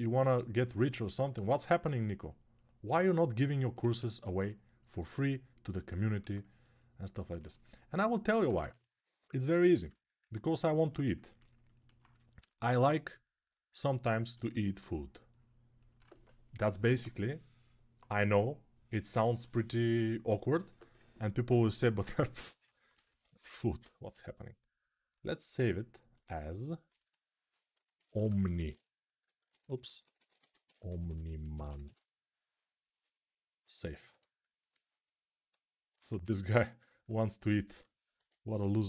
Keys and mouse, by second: 3.6 ctrl+z, 22.9 ctrl+s, 36.6 alt+q, 37.9 1.